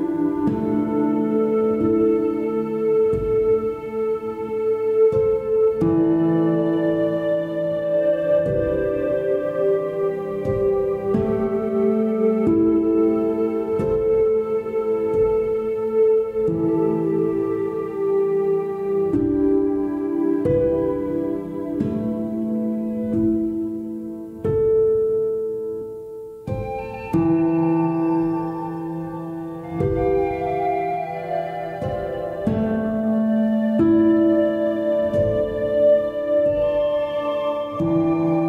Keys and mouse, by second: 3.8-10.3 drag, 7.7 BackSpace, 13.5 Tab, 15.3 g, 17.6 a, 24.0 click, 25.9 shift+h, 28.9 3, 32.4 click, 35.5 z, 37.4 a, 38.0 e.